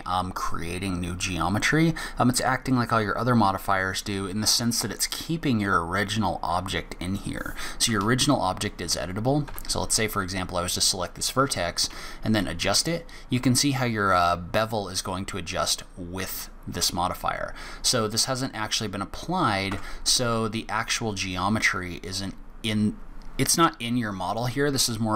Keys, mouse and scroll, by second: 9.6 1, 11.9 g, 19.7 Tab, 20.2 Tab.